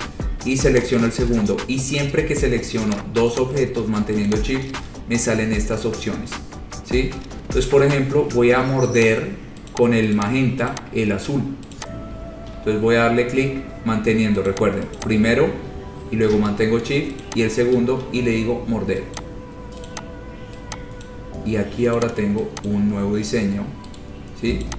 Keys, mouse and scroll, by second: 0.9 shift+click, 3.1 click, 3.5 click, 3.7 shift+click, 4.5 shift+click, 9.3 click, 10.0 click, 10.1 shift+click, 10.5 click, 11.0 click, 12.0 shift+click, 12.1 shift+click, 14.7 click, 15.2 click, 17.4 shift+click, 19.4 click, 20.1 click, 21.3 click, 22.2 click, 22.9 click, 23.2 shift+click, 24.2 right click.